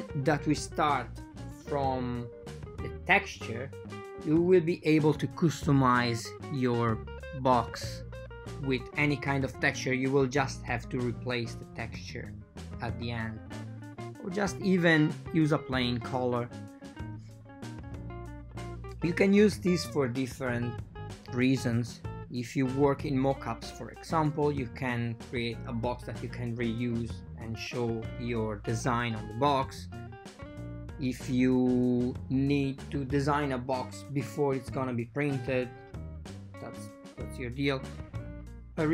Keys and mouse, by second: 1.7 click, 2.1 right click, 4.5 alt+v, 5.6 super+z, 6.7 v, 7.7 super+z, 11.7 a, 12.4 a, 12.4 k, 14.8 k, 17.7 click, 19.0 x, 19.8 click, 20.2 shift+x, 21.5 k, 25.7 click, 26.2 shift+click, 26.5 x, 28.5 k, 30.7 k, 33.0 right click, 33.3 shift+right click, 33.5 x, 35.3 k, 38.3 k.